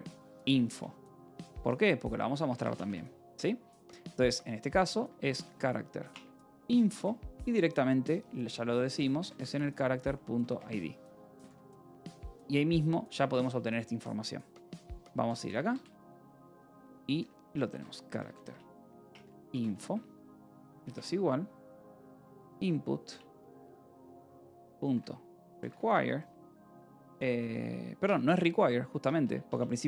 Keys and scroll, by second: 0.0-2.8 typing, 4.2-7.3 typing, 8.6-11.4 typing, 11.7 Escape, 12.6 ctrl+s, 14.5-26.1 typing, 27.6 Left, 27.9 BackSpace, 29.1 BackSpace.